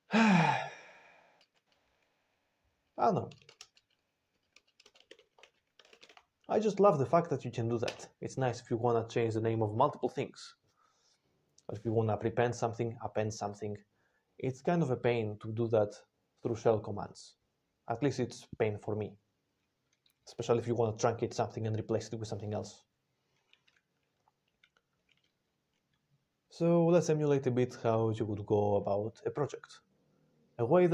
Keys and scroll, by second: 3.3 r, 4.9-6.5 typing, 7.7 Return.